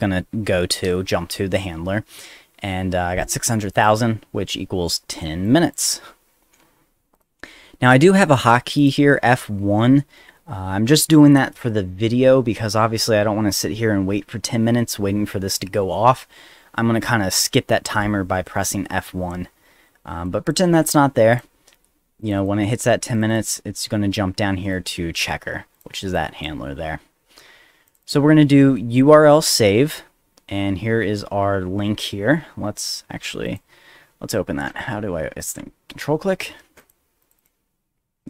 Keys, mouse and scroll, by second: 3.7 click, 5.4 click, 7.1 click, 8.0 click, 8.8 click, 20.2 click, 21.3 click, 22.2 click, 22.4 click, 23.1 click, 23.3 click, 24.7 click, 25.7 click, 26.1 click, 27.9 click, 28.0 click, 33.4 shift+click, 34.7 click, 35.4 ctrl+click, 36.8 ctrl+click, 37.2 ctrl+click, 37.4 ctrl+click, 37.9 ctrl+z.